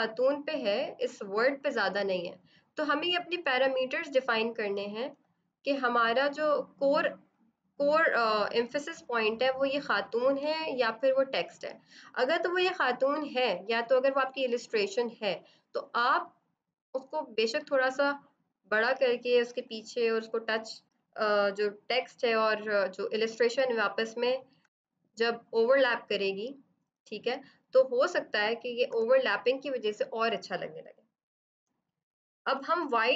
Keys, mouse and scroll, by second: 0.9 click, 3.2 click, 5.0 click, 8.7 ctrl+z, 10.3 ctrl+g, 12.9 right click, 14.3 click, 16.1 shift+click, 19.5 click, 24.3 ctrl+Caps_Lock, 24.5 ctrl+y, 28.3 ctrl+Caps_Lock, 28.8 ctrl+y, 29.7 click.